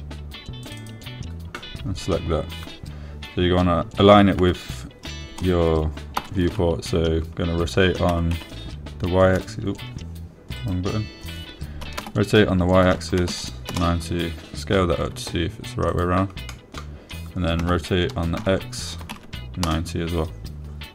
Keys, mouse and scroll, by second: 5.8 s, 7.6 y, 9.5 9, 11.9 click, 13.4 r, 14.2 y, 14.6 9, 15.1 Return, 15.1 0, 16.4 s, 17.3 click, 17.9 drag, 19.0 r, 19.8 x, 20.4 9, 20.5 0.